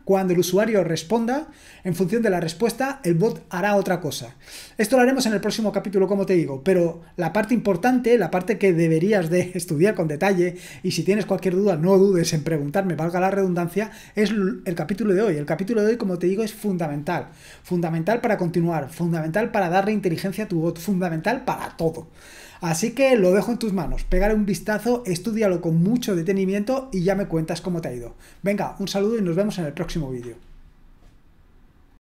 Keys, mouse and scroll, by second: 31.9 click.